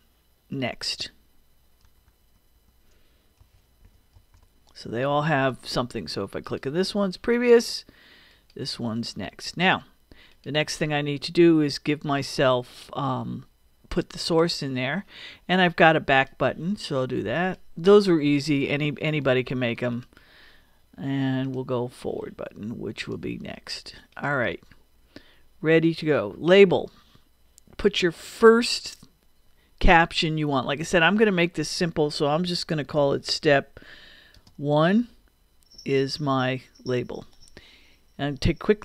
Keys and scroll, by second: 1.9 BackSpace, 3.4 n, 4.9 Return, 32.2-34.6 typing, 36.4 Return.